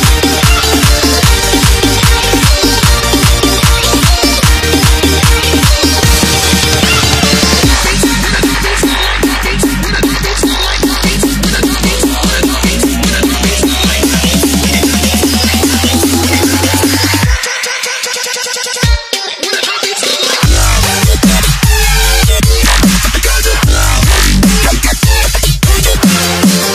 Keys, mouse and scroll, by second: 1.1 ctrl+s, 2.3 click, 6.5 z, 7.5 ctrl+s, 8.6 click, 9.8 scroll up 1, 10.5 click, 11.2 Delete, 11.7 click, 12.3 click, 14.8 click, 16.2 Return, 16.9 scroll up 2, 17.8 click, 19.1 ctrl+c, 19.6 click, 20.9 ctrl+v, 21.8 click, 26.2 ctrl+c, 26.5 alt+Tab.